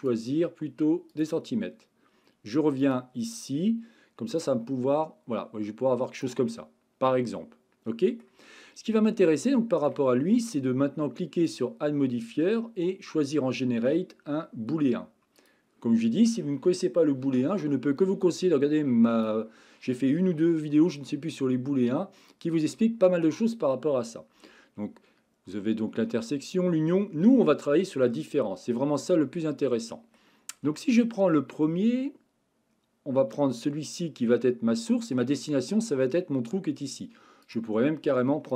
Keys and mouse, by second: 0.0-1.3 drag, 2.8 click, 4.4-6.4 drag, 6.6-8.2 middle drag, 9.1 middle click, 9.5-9.9 shift+middle drag, 11.6-15.5 drag, 18.5 click, 22.4-23.6 drag, 29.3-30.2 middle drag, 30.8-31.4 shift+middle drag, 34.3-35.1 middle drag, 37.5 click.